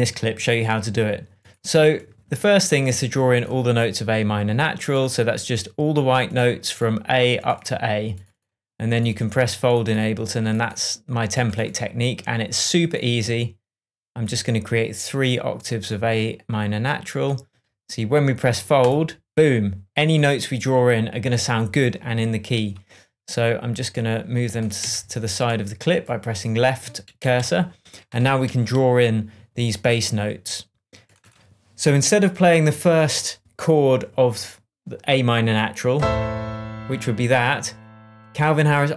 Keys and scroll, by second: 24.7 Left.